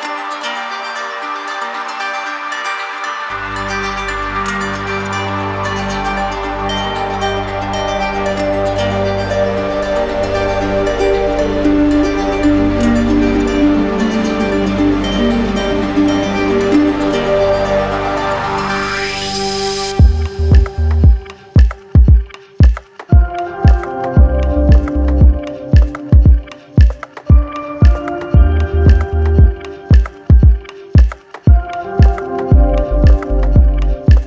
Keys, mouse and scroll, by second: 0.6 click, 1.2 click, 2.3 alt+click, 3.5 alt+click, 4.0 click, 4.9 alt+click, 7.6 click, 9.1 click, 22.5 z, 25.1 d, 25.5 d, 27.1 d, 28.0 right click, 29.0 click, 29.7 click, 30.8 click, 32.7 alt+click, 33.8 alt+click, 34.1 alt+click.